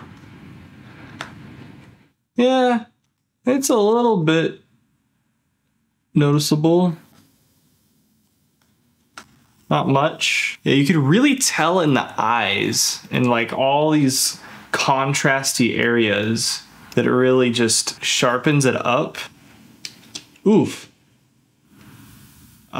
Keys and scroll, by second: 0.8 ctrl+shift+z, 1.6 ctrl+z, 2.8 ctrl+shift+z, 6.0 ctrl+z, 8.3 ctrl+z, 9.1 ctrl+shift+z, 9.9 ctrl+f, 19.2 ctrl+f.